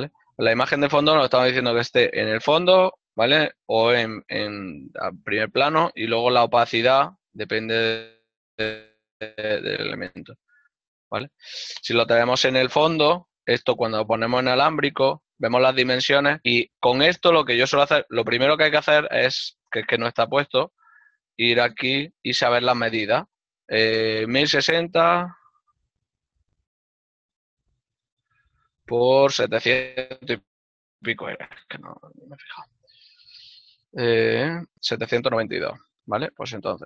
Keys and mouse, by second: 26.7 click, 30.2 KP_6, 34.2 click.